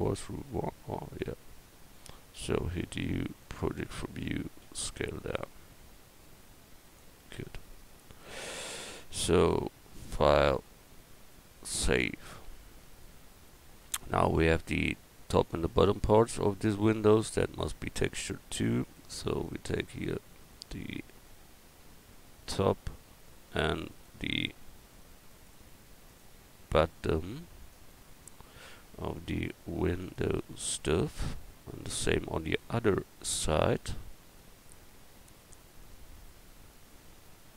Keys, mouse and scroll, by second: 2.8 u, 4.6 s, 7.2 Tab, 10.4-12.7 drag, 12.9 middle click, 17.4 Tab, 17.9-20.4 drag, 23.4 right click, 26.2 shift+right click, 28.1 right click, 28.5 right click, 29.7-31.7 middle drag, 37.0 middle click.